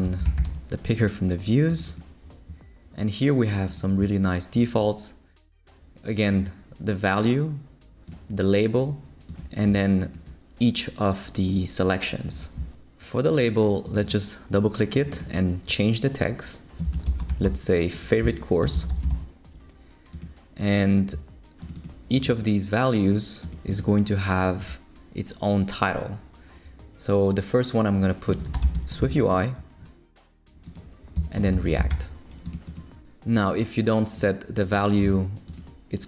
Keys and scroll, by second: 0.0-0.9 typing, 16.6-19.6 typing, 28.2-29.5 typing, 31.2-32.4 typing.